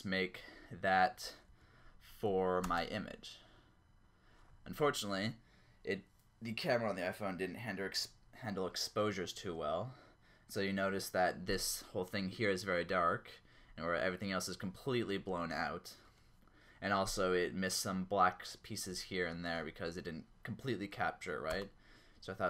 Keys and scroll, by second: 1.5 Down, 2.6 space, 21.5 space.